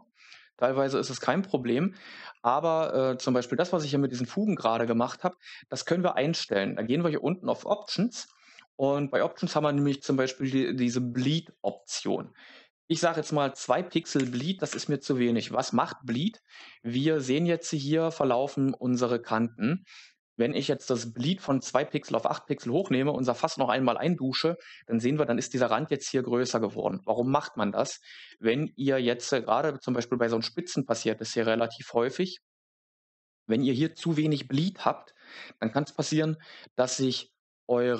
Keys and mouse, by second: 1.1 click, 7.8 click, 11.7-14.6 drag, 22.7 click.